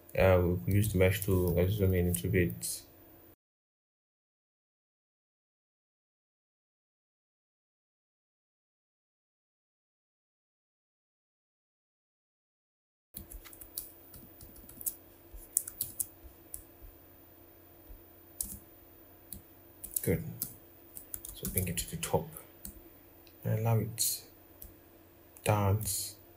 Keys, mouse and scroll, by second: 1.2 ctrl+=, 1.3 ctrl+=, 1.6 ctrl+=, 4.3 ctrl+z, 10.7 ctrl+-, 10.9 scroll, 11.2 typing, 12.2 scroll, 13.0 double click, 13.8 ctrl+-, 14.1 ctrl+-, 14.4 ctrl+-, 15.1-16.0 scroll, 16.0 scroll down 1, 16.1 scroll, 16.3-16.7 scroll down 1, 18.1 v, 20.1 ctrl+-, 21.0 ctrl+scroll down 1, 21.2 ctrl+shift+].